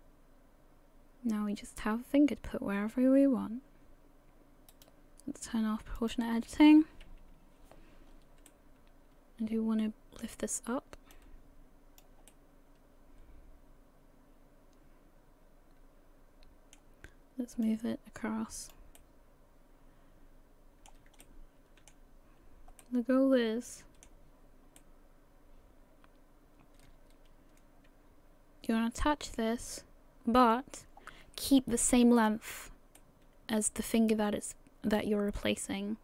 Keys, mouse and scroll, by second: 6.0 click, 8.5 middle click, 11.1 click, 12.3 middle click, 17.6 click, 19.0 middle click, 21.2 shift+middle click, 22.4-22.8 scroll up 1, 22.8 middle click, 24.8 middle click, 33.0 middle click.